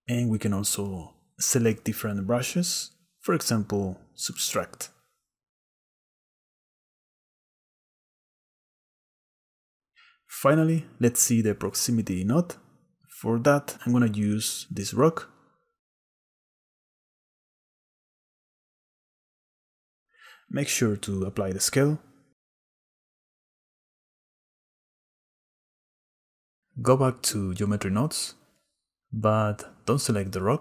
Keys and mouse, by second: 4.2 shift+click, 5.1 click, 5.9 click, 6.3 f, 6.9 click, 7.8 shift+click, 8.1 click, 8.5 click, 8.8 click, 9.0 click, 11.4 click, 13.0 s, 15.6 s, 17.2 click, 18.9 click, 19.6 click, 20.5 click, 21.4 click, 22.0 ctrl+a, 24.2 s, 26.3-27.7 drag, 28.7 click, 30.0 click.